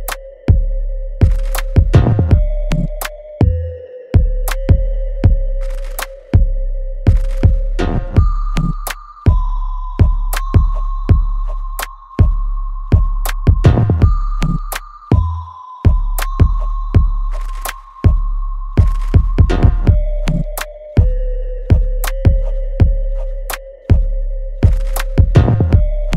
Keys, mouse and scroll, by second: 2.0 alt+right click, 2.5-5.9 alt+drag, 5.9 alt+right click, 6.4-8.0 alt+drag, 12.2 click, 12.7-14.4 alt+right drag, 14.4 click, 16.1-19.5 ctrl+drag, 21.1 alt+middle click, 21.6-23.6 right drag, 23.6 click, 24.0 alt+right click, 24.4 alt+click, 25.3 right click.